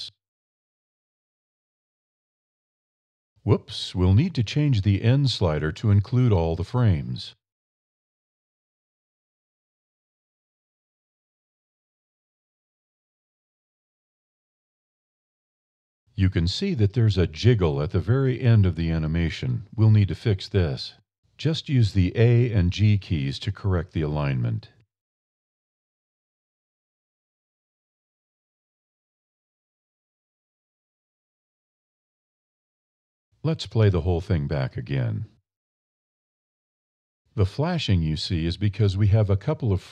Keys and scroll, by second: 22.5 Down, 24.6 a, 24.9 g, 26.5 Down, 27.6 Down, 28.5 Down, 29.8 Up, 30.7 a, 31.0 g, 33.1 Up.